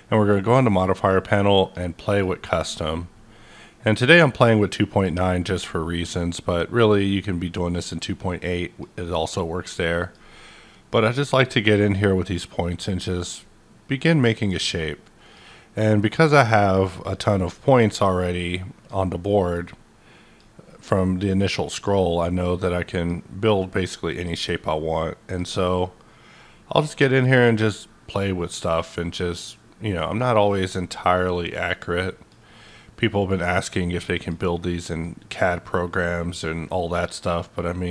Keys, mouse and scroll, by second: 0.9 click, 2.0 click, 4.0-7.0 drag, 7.0-10.9 drag, 10.9-24.1 drag, 24.1 click, 24.6-34.1 drag, 34.1 click, 35.0-37.9 drag.